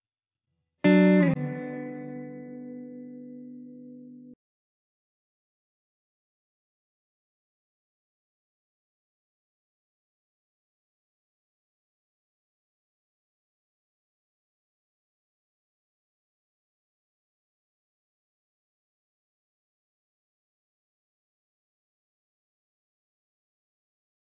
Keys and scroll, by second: 8.3 ctrl+t, 14.7 Return.